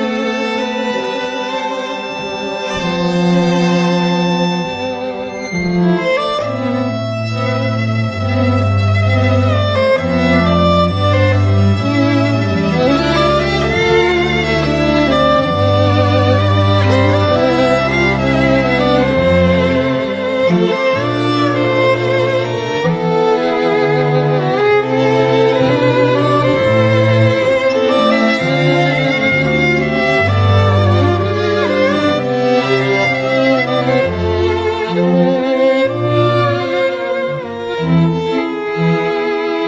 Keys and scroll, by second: 14.0 ], 32.8 [.